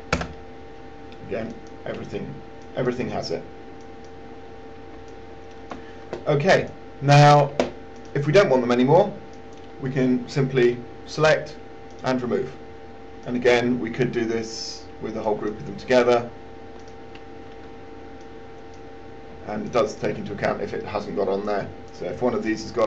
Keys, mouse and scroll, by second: 1.8-6.0 drag, 6.9 alt+click, 8.1 click, 17.1 click, 18.2 click, 20.1 shift+click, 22.2 click.